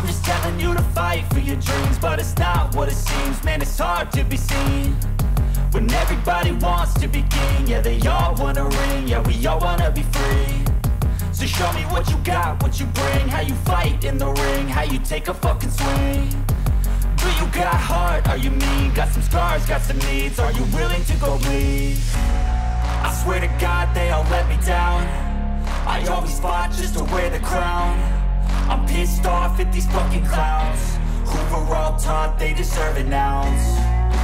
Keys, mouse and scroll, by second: 1.3 click, 3.1 click, 5.4 click, 6.0 click, 6.1-6.4 middle drag, 7.0 middle click, 7.2 click, 7.7-8.5 middle drag, 8.6 click, 9.0 click, 9.3 click, 10.3 click, 12.2 click, 13.5 click, 16.1 middle click, 16.4 click, 16.8 click, 17.5 click, 17.9 click, 18.3 click, 19.5 click, 20.2 click, 20.5 click, 21.0 click, 21.2 click, 21.8 click, 22.4-22.7 scroll, 22.7 click, 23.2-24.2 typing, 24.1 click, 24.9 click, 25.3 click, 25.5 click, 25.8 click, 25.9 click, 26.2 click, 26.3 click, 26.9 click, 27.1 click, 27.6 click, 27.8-29.1 typing, 29.4 click, 30.0 click, 30.5 click, 30.8 click, 31.1 click, 31.2 click, 31.5 click, 31.6 click, 32.4 click, 33.0 click, 33.2 click, 33.6 click.